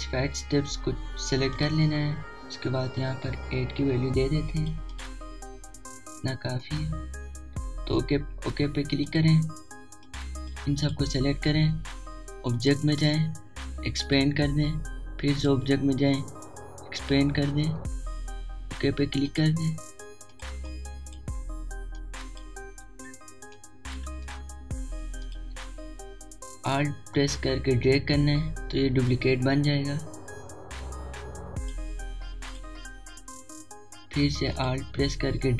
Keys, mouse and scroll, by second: 2.6 click, 4.8 8, 5.6 click, 10.1-13.6 drag, 20.3-25.3 drag, 28.5-33.5 alt+drag.